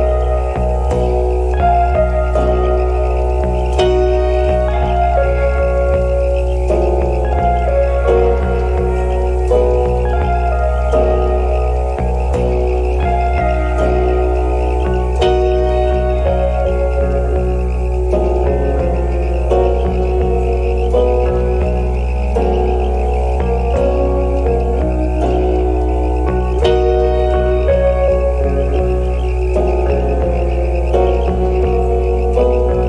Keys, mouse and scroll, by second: 0.5-1.2 scroll up 3, 0.8 alt+click, 1.2 alt+middle click, 1.7 scroll down 1, 2.3 shift+click, 2.8 shift+click, 3.3 double click, 3.4 shift+click, 3.5 shift+click, 4.1 alt+scroll down 1, 4.4 shift+click, 4.7 shift+click, 5.7 shift+click, 6.3 shift+click, 6.8 shift+click, 7.1 shift+click, 7.6 shift+click, 7.9 alt+middle click, 8.0-8.4 alt+scroll up 1, 9.2 shift+click, 9.8 shift+click, 10.4 shift+click, 11.2 alt+click, 11.8 shift+click, 12.7 shift+click, 13.2 Tab, 13.8 alt+click, 14.0 ctrl+z, 14.1 ctrl+z, 14.9 Tab, 15.4 alt+click, 15.6 alt+click, 17.1 alt+click, 17.2 ctrl+z, 17.5 ctrl+z, 17.6 ctrl+z, 18.3 alt+click, 19.1 shift+click, 22.3 alt+click, 23.3 alt+click, 23.6 alt+click, 24.5 alt+click, 25.0 alt+click, 25.7 alt+click, 26.5 alt+click, 27.2 alt+click, 27.4 ctrl+z, 27.7 shift+click, 28.0 Tab, 28.4 Tab, 28.6 ctrl+z, 28.7 ctrl+z, 29.0 alt+click, 30.0-30.7 scroll down 1, 30.8 alt+middle click, 30.9 alt+click, 31.1 alt+click, 31.6 alt+click, 32.0 shift+click.